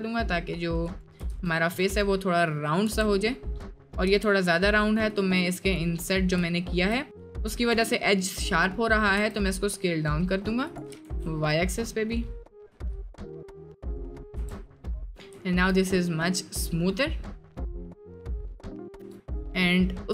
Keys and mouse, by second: 1.3 Tab, 2.3 middle click, 3.3 click, 4.1 s, 5.6 click, 6.5 shift+click, 7.4 shift+click, 9.1 s, 10.9 s, 13.4 click, 14.4 Tab, 14.7 middle drag, 15.4 shift+middle drag, 16.2 middle click, 17.0 middle click, 17.8-18.3 middle drag, 18.5 middle drag, 19.0 Tab.